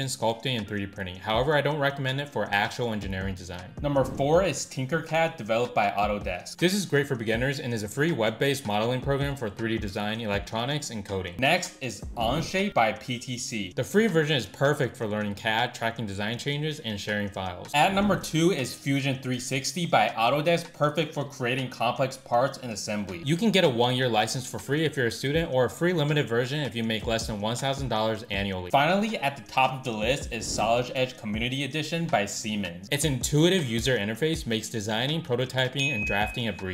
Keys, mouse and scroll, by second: 0.1 click, 0.1 shift+middle click, 0.8 shift+g, 1.0 ctrl+i, 1.4 shift+g, 1.8 middle click, 2.1 ctrl+x, 2.2 middle click, 2.3 click, 2.5 scroll, 2.6 shift+g, 2.9 KP_3, 3.1 ctrl+click, 3.2 shift+middle click, 3.3 ctrl+click, 3.4 shift+z, 3.5 middle click.